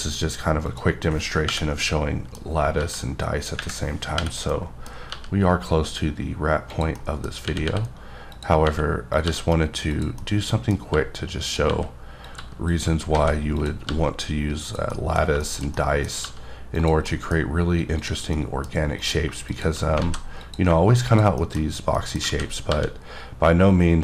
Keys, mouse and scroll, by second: 0.7 click, 1.8 middle click, 2.8 g, 4.5 middle click, 5.1 g, 5.6-6.7 scroll down 4, 6.7 click, 7.0 middle click, 7.5 r, 7.6 r, 8.3 click, 8.7 r, 9.1 click, 9.3 g, 9.9 click, 10.2 middle click, 10.9-13.9 typing, 11.4 click, 12.2 click, 12.7 click, 13.6 click, 14.7 click, 14.9 middle click, 16.2 g, 16.8 click, 17.1 middle click, 18.0 click, 18.3 middle click, 19.1 click, 20.2 alt+z, 20.4 click, 21.4 shift+middle click, 22.3 alt+z, 22.7 g, 23.6-24.0 scroll up 5.